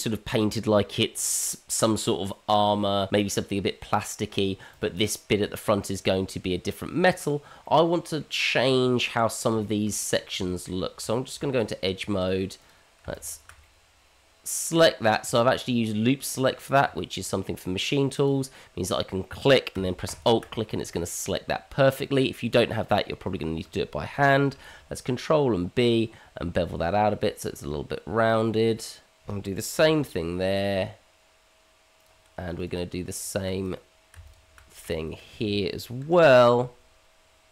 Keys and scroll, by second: 10.3 Tab, 24.5 ctrl+b, 29.8 ctrl+b, 36.0 ctrl+b.